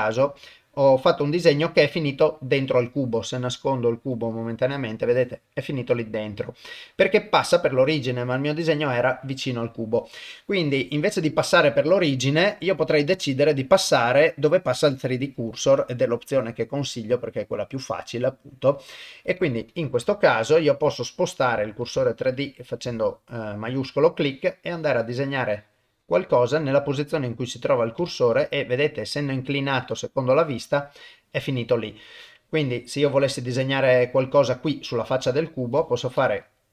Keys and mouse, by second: 0.5 middle click, 4.1 click, 7.6 middle click, 12.7-19.7 drag, 20.2 ctrl+middle click, 20.9 middle click, 22.0 shift+middle click, 22.5 middle click, 23.0 ctrl+middle click, 24.2-26.1 drag, 26.4-27.5 middle drag, 28.0 shift+middle click, 28.4 middle click, 29.4-30.4 middle drag, 30.8 middle click, 32.0-33.6 middle drag, 34.2 middle click, 35.4 shift+right click, 36.0-36.7 middle drag.